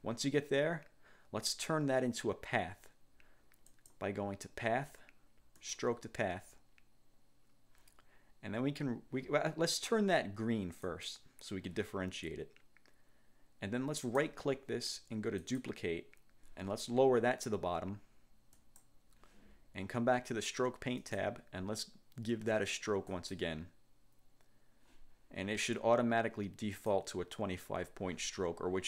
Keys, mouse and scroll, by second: 3.8 click, 5.7 click, 11.0 click, 14.2 click, 15.5 click, 18.6 click, 21.1 click, 23.2 click, 26.9 click.